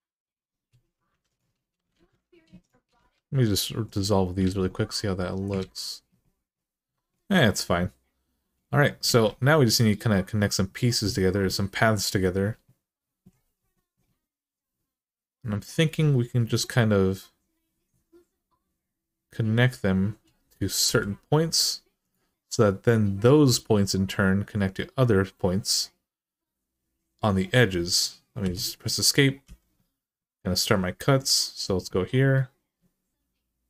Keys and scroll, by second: 0.9 2, 1.7 alt+z, 2.7 x, 4.2 alt+z, 5.4 ctrl+z, 8.8 alt+z, 20.6 k, 28.2 Escape, 29.2 k.